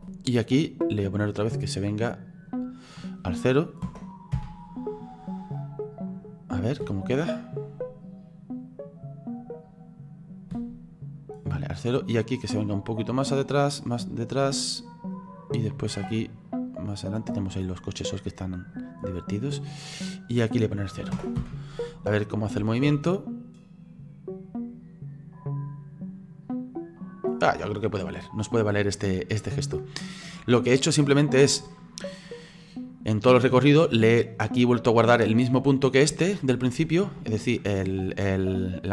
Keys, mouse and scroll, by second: 2.5 click, 5.4 right click, 6.7 click, 6.9 space, 10.6 space, 11.4-15.6 drag, 16.5-18.7 drag, 20.4-22.9 drag, 22.9 space, 27.5 space, 28.1-29.5 middle drag, 29.5-30.9 scroll down 3, 30.9-34.0 drag, 36.2-38.9 shift+middle drag.